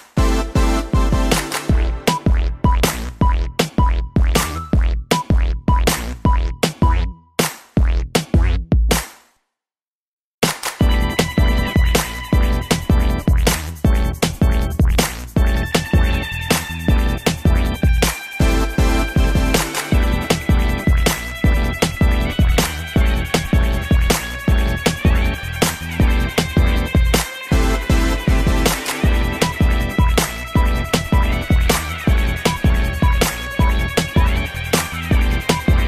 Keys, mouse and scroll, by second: 1.7 click, 2.6 shift+space, 3.8 Escape, 4.8 click, 9.7 click, 11.6 click, 20.8 middle click, 23.7 scroll up 1, 24.5 click, 24.6 click, 25.1 shift+middle click, 26.3 click, 30.8 middle click, 31.9 click, 33.9-34.2 typing, 35.3 x.